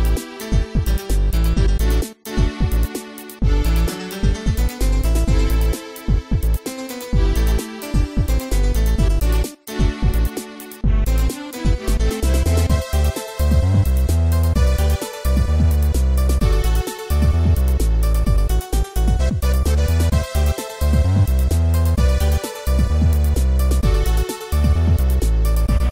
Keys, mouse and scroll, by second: 0.2-0.8 typing, 2.6 middle click, 3.5 click, 3.6 click, 4.1 click, 12.7 click, 13.8 click, 14.6 click, 16.2 click, 17.1 click, 18.7-19.3 typing, 21.3 click, 21.9 Tab, 22.3 click, 23.1 ctrl+s, 23.2 click, 23.5 a, 23.9 scroll down 1, 24.6 ctrl+s.